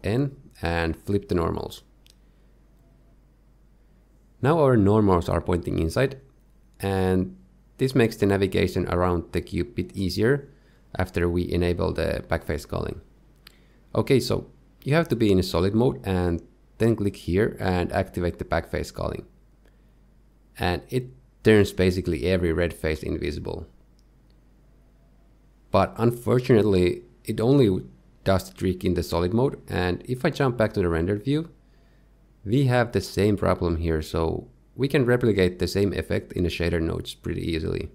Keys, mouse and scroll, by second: 1.2 alt+n, 5.3 Tab, 5.8 middle click, 6.5-7.4 scroll up 6, 6.8 shift+middle click, 7.0 shift+middle click, 7.4-7.9 scroll down 2, 7.9 middle click, 8.3 scroll down 1, 8.6 shift+middle click, 8.6 scroll up 1, 8.7 shift+middle click, 8.9 middle click, 9.0-9.3 scroll down 5, 9.3 middle click, 10.9 middle click, 11.5 click, 14.2 z, 16.6 click, 19.9 middle click, 22.3 middle click, 24.8 middle click, 25.7 middle click, 30.4 z, 31.2 middle click.